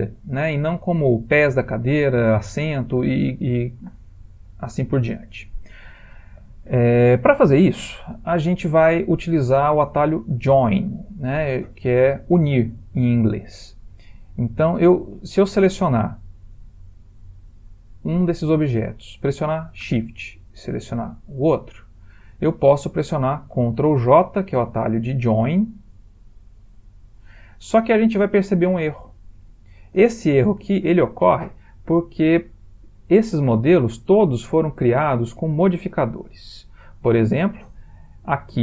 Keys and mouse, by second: 2.1 click, 4.7 ctrl+middle click, 5.0 ctrl+middle click, 13.6 click, 20.7 shift+click, 26.5 ctrl+j, 30.7 ctrl+z, 37.4 click.